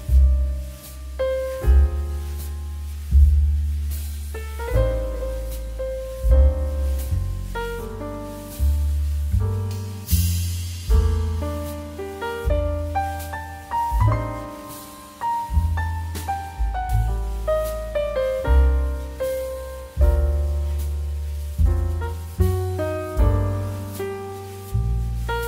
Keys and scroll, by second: 8.7 space, 10.9 shift+2, 15.4 space, 20.5 space, 21.3 shift+space, 22.7 space.